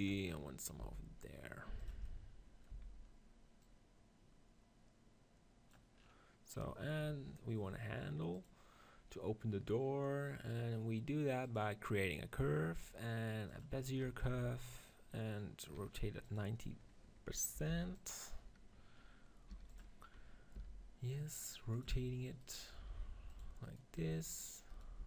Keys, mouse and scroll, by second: 0.7 g, 2.6 z, 6.9 KP_1, 7.7-8.8 middle drag, 8.8-10.1 drag, 13.8 middle click, 14.2 g, 14.6-18.0 drag, 18.3-19.7 middle drag, 19.4 g, 19.7-21.6 drag, 20.4 r, 21.7-23.6 drag, 21.8 Tab, 22.3-23.6 right drag, 22.9 r, 24.0 r, 24.9 g.